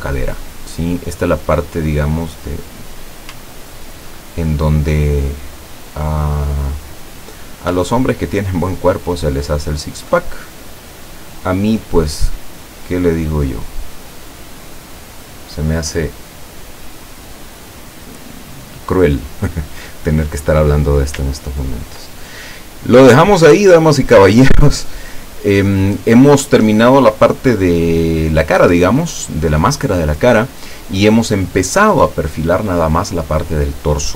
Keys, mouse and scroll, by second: 2.9 click, 3.5-5.8 ctrl+drag, 6.5 click, 8.0-10.2 ctrl+drag, 11.4-13.6 drag, 14.7 click, 21.5-21.9 ctrl+scroll down 1, 22.2 ctrl+middle click.